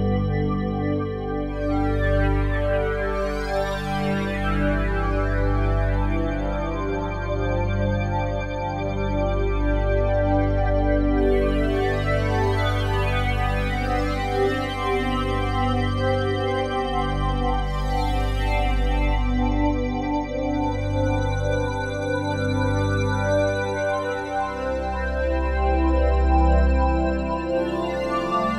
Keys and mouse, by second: 4.8 click, 6.2 click, 6.9 click, 7.6-13.5 drag, 13.5 g, 13.9 x, 18.7-24.7 shift+drag, 18.7 typing, 24.7-25.1 typing, 25.4 Return, 27.9-28.5 drag.